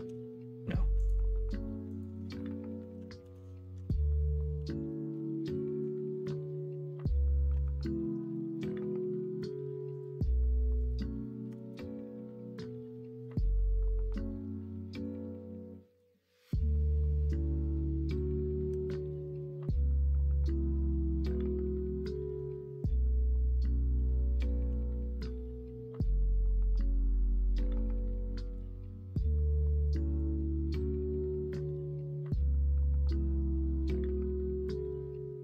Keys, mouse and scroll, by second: 1.5-5.1 drag, 5.1 middle click, 7.5 /, 8.0 middle click, 10.5-16.1 drag, 16.1 middle click, 16.6 alt+z, 18.7 /, 19.2-22.3 middle drag, 20.9 typing, 23.9 :, 24.6 l, 27.6 click, 30.4-31.7 middle drag.